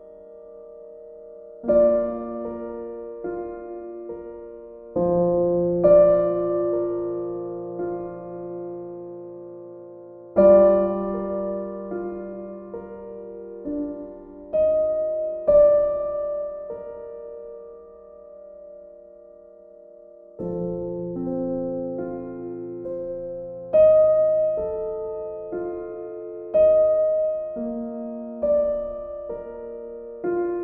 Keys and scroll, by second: 12.5 ctrl+z.